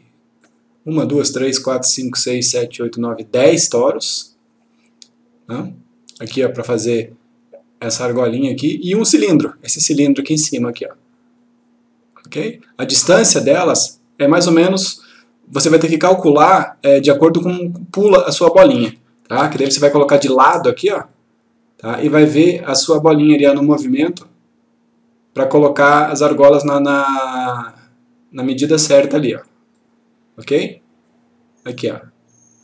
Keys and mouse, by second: 12.5-13.4 click, 19.5 F4, 21.1-22.3 click, 23.8-26.9 click.